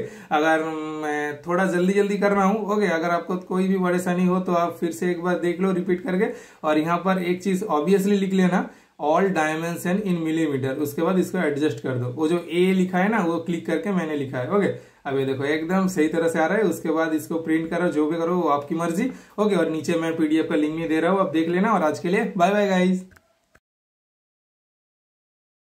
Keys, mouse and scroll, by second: 4.5 super+middle click, 4.5 typing, 5.1 super+scroll up 1, 5.9 super+scroll down 1, 6.1 super+scroll up 1, 6.4 super+middle click, 7.0 super+scroll up 1, 7.1 super+scroll down 1, 7.7 super+click, 9.9 super+click, 10.1 super+space, 11.1 super+click, 11.7 typing, 11.9 super+Delete, 13.0 super+click, 16.5 super+scroll up 1, 16.5 typing, 16.6 super+scroll down 3, 17.2 super+middle click, 17.6-18.0 super+scroll down 1, 18.4-19.1 super+scroll up 2, 18.6 super+middle click, 19.3 super+scroll down 1, 21.0 super+click, 21.5-22.0 super+scroll down 1, 22.1 super+click, 22.6 super+scroll down 1, 22.6 typing, 22.7 super+click, 23.2 super+scroll down 1, 23.3 super+click, 23.8-25.0 super+scroll down 3, 23.9 super+click, 24.5 super+click, 25.1 super+click, 25.2-25.6 super+scroll down 1.